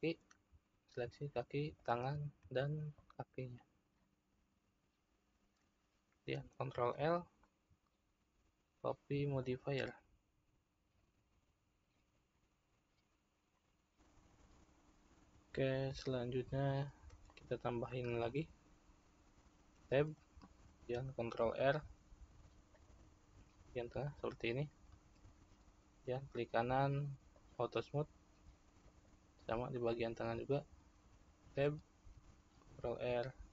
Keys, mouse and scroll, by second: 1.7 shift+click, 3.0 shift+click, 4.8-7.2 middle drag, 7.2 ctrl+l, 14.0 click, 18.4-21.3 shift+middle drag, 21.3 Tab, 23.0 ctrl+r, 27.5 right click, 30.4-33.5 middle drag.